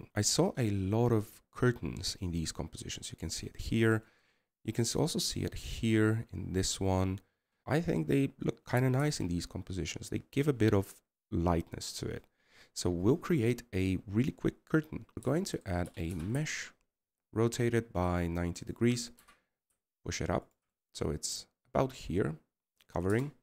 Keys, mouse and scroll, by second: 0.0 KP_1, 17.3 middle click.